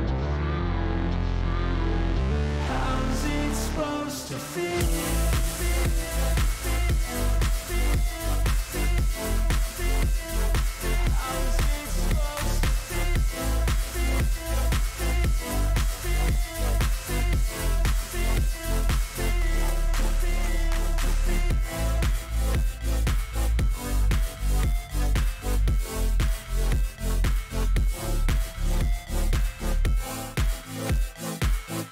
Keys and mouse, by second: 0.7 click, 1.8 click, 2.2 click, 3.2 shift+click, 4.6 shift+click, 5.5 ctrl+shift+click, 7.0 click, 9.2-11.1 drag, 12.2 alt+shift+click, 14.8-16.3 drag, 17.4 click, 18.4 click, 19.2 click, 20.2 click, 22.2 shift+click, 23.3 click, 26.5-27.6 drag, 29.6-30.9 drag.